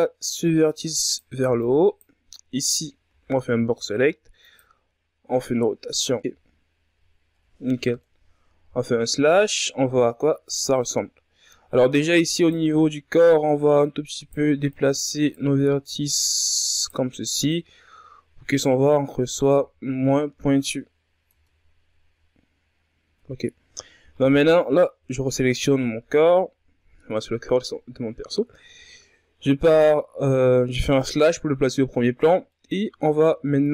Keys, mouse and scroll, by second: 0.2 right click, 1.1 b, 2.2 r, 4.6-5.9 drag, 5.9 z, 6.1-6.9 scroll down 4, 6.9 Tab, 7.3 a, 7.7-8.9 scroll down 3, 8.9 KP_Divide, 10.1-10.9 scroll down 3, 10.9-11.5 ctrl+scroll down 2, 12.0-12.3 scroll up 3, 12.4-13.1 ctrl+scroll down 5, 13.1-13.4 scroll up 2, 13.4 right click, 13.8 Tab, 14.5 right click, 15.7 right click, 16.9 right click, 18.5 right click, 19.7 Tab, 20.2-20.6 scroll down 5, 20.6 a, 21.3-21.7 scroll up 3, 22.3 Tab, 22.6 scroll up 1, 23.8 scroll down 2, 24.1 Tab, 25.3 right click, 26.0 KP_Divide, 27.1 ctrl+scroll up 4, 27.9-28.7 shift+scroll up 2, 28.7-29.7 scroll up 4, 29.7-30.6 ctrl+scroll up 2, 30.7-31.6 shift+scroll up 2, 31.6-33.3 ctrl+scroll down 4, 33.3 scroll down 2, 33.6-33.7 middle drag.